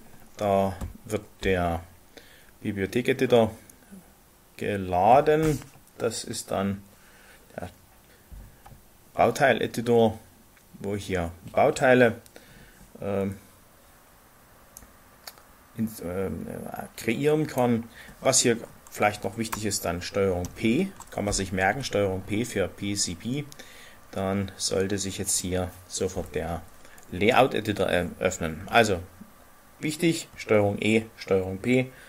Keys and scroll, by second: 20.4 ctrl+p.